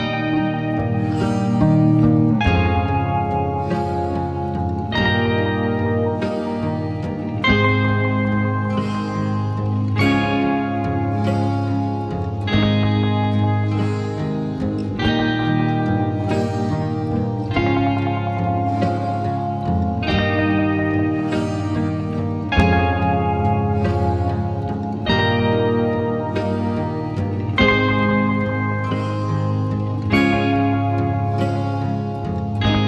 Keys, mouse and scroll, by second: 0.5-0.8 scroll up 2, 0.8 click, 1.3-1.8 scroll up 2, 1.5 click, 1.8-2.4 scroll down 5, 2.4 click, 3.0 shift+a, 6.2 r, 7.5 g, 8.7 s, 9.9 s, 12.9 s, 14.1 r, 16.2 ctrl+z, 16.6 s, 20.1 s, 21.7 r, 23.9 g, 25.2-25.7 drag, 25.7 shift+a, 28.5 s, 30.1 g, 32.5 click.